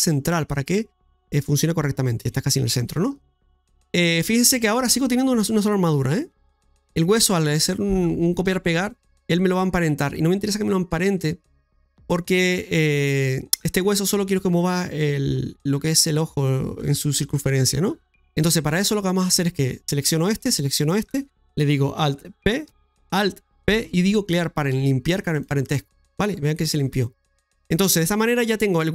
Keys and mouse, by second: 0.5-2.9 middle drag, 3.7 KP_Divide, 3.9 middle click, 4.5 middle click, 20.0 right click, 20.9 shift+right click, 22.6 alt+p, 27.2 middle click, 28.6 middle click.